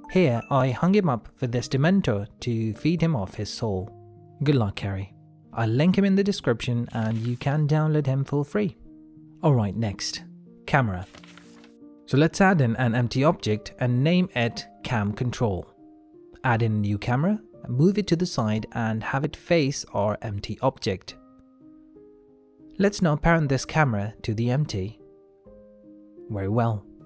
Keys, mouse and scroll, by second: 11.5 shift+a, 14.2 F2, 16.2 click, 16.5 shift+a, 18.1 middle click, 18.3 alt+g, 18.7 alt+r, 19.4 middle click, 19.9 g, 21.6 shift+middle click, 22.3 r, 24.9 shift+click, 25.3 ctrl+p.